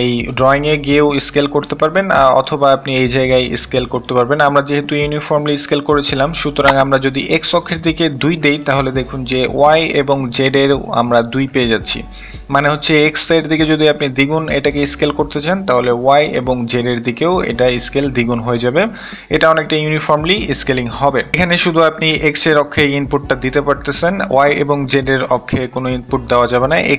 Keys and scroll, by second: 5.3 2.